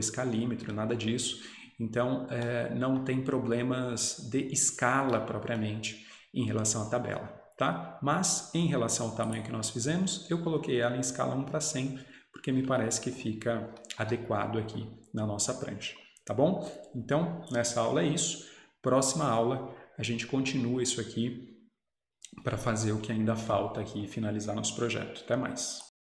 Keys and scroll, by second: 14.1 Escape.